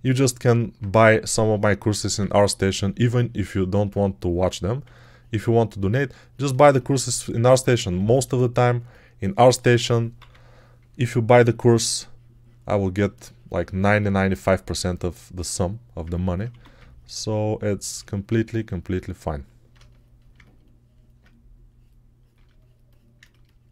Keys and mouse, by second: 0.8 1, 4.7 3, 10.0 p, 16.4 1.